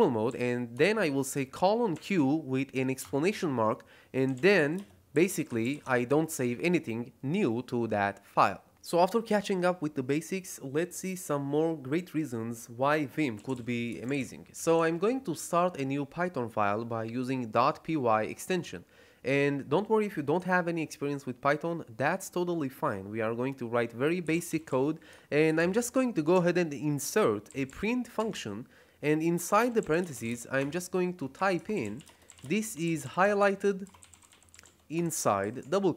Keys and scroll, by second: 0.2 q, 1.8 shift+1, 2.9 Return, 3.9-6.1 typing, 13.1-15.1 typing, 18.4 Return, 23.9-26.0 typing, 27.4 shift+,, 27.6 shift+,, 29.2-35.5 typing.